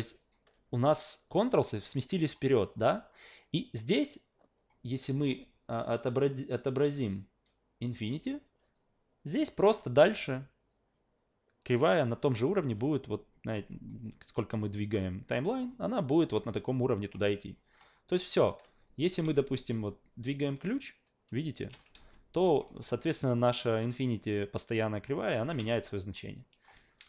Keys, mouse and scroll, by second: 2.2 click, 2.8 alt+middle drag, 4.6 click, 8.0 click, 8.7-9.6 alt+right drag, 12.8 alt+middle click, 13.3 alt+middle click, 13.9 alt+middle click, 14.5-15.3 alt+right drag, 15.5 alt+middle click, 15.9 alt+right click, 17.1 alt+middle click, 17.8 alt+middle click, 18.1 alt+middle click, 19.0 w, 19.5-21.7 shift+middle drag, 22.0 ctrl+z, 22.6 alt+middle click, 25.4 w, 25.7-26.4 shift+middle drag, 26.8 ctrl+z.